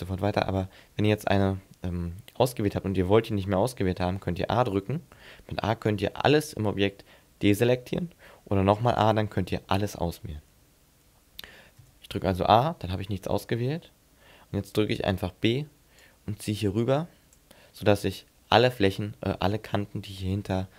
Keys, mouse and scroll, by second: 5.1 a, 9.0 a, 11.8 a, 14.9 b, 18.2 middle click.